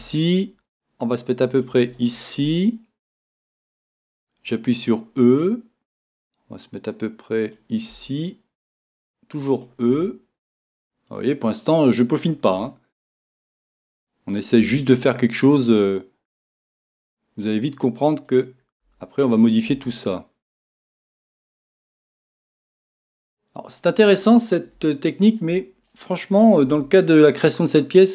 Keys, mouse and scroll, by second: 0.0 e, 1.4 e, 1.6 click, 2.6-5.4 middle drag, 4.0 e, 7.5 click, 7.9 e, 9.9 e, 11.8 click, 12.7-14.6 middle drag, 14.6 e, 16.5 click, 16.8 e, 18.8 e, 19.7 e, 21.4 click, 21.7 e, 23.9 click, 24.9-26.8 middle drag, 26.7 e.